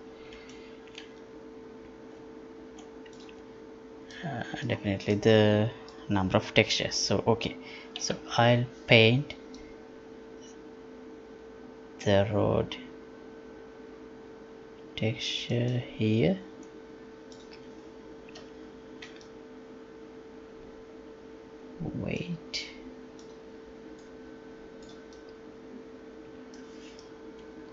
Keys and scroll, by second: 8.0 F11.